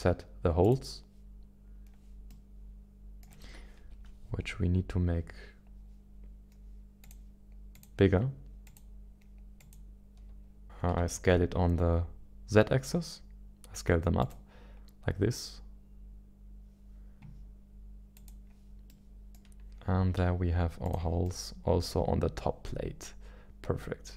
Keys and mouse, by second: 2.3-3.3 middle drag, 3.7 KP_1, 7.0 click, 7.7 click, 8.6 click, 9.6 click, 10.6 s, 12.4 s, 13.7 z, 18.2 click, 18.9 middle click, 20.2 z, 21.2-24.1 middle drag.